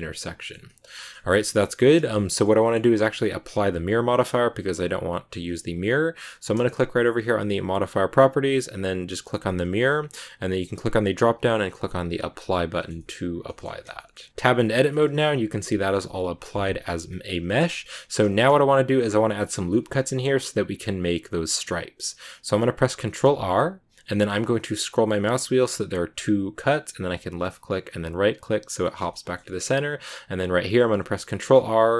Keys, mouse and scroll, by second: 2.0-2.5 scroll up 2, 2.2-7.4 shift+middle drag, 7.5 click, 9.0 click, 10.8-12.7 drag, 12.7-14.3 shift+middle drag, 14.3 Tab, 14.4-14.8 scroll down 3, 14.8 shift+middle click, 15.0 a, 15.1 middle click, 16.0 scroll up 1, 17.0-17.4 scroll up 1, 17.4-18.4 shift+middle drag, 18.4-18.8 scroll up 1, 23.2 ctrl+r, 29.0 shift+middle click, 29.3 scroll up 1, 31.2 ctrl+r.